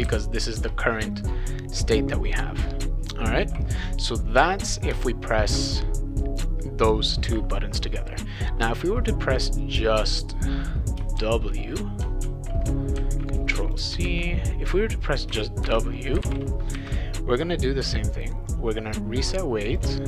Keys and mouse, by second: 0.0-0.6 typing, 4.7 click, 4.9 Return, 5.5 Return, 9.6-11.0 drag, 11.2 shift+f, 12.2 ctrl+z, 13.0 ctrl+c, 13.6 click, 14.1 ctrl+v, 15.4-16.7 typing, 18.5-19.8 drag.